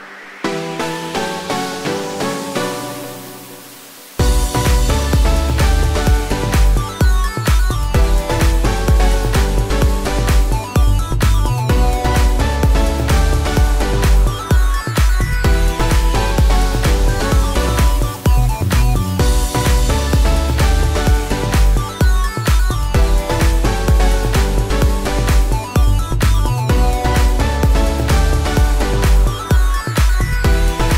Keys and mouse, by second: 7.7-12.8 alt+middle drag, 11.6-14.7 right drag, 12.1 shift+3, 14.8-16.0 middle drag, 15.4 2, 16.0 click, 16.1-19.8 middle drag, 19.8 ctrl+click, 20.1-24.3 ctrl+middle drag, 20.5 alt+z, 20.9 alt+z, 24.3 right click, 24.8 shift+click, 24.9-30.9 right drag, 25.0 click, 25.0 middle click, 27.2 2, 28.5 ctrl+click, 29.8 ctrl+click, 29.8 ctrl+middle click.